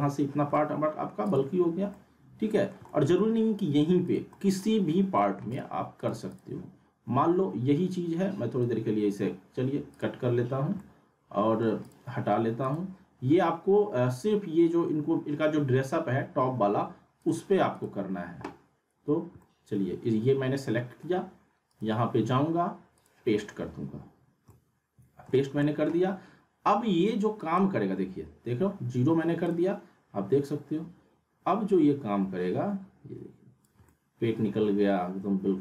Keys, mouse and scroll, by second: 0.3 scroll down 1, 0.5-1.1 alt+middle click, 1.3 click, 1.9-2.9 middle click, 2.9-3.5 alt+middle click, 4.0 click, 4.3 middle click, 5.5 click, 8.5 right click, 9.9 click, 10.8-11.7 alt+middle click, 11.8 click, 17.2 click, 18.8 scroll up 1, 19.4-21.3 alt+middle drag, 21.7 right click, 22.9 click, 24.2 scroll up 1, 24.8-25.4 alt+middle click, 25.4 scroll down 1, 25.6 alt+middle click, 27.4 right click, 29.4-35.6 drag, 33.9-35.6 alt+middle drag.